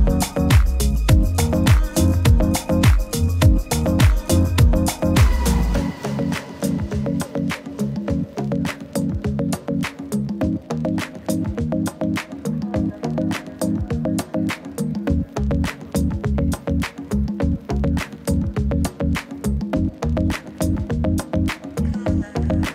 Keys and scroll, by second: 7.2 super+-, 15.0 super++, 15.1 super++, 15.2 super++, 21.7 super+-.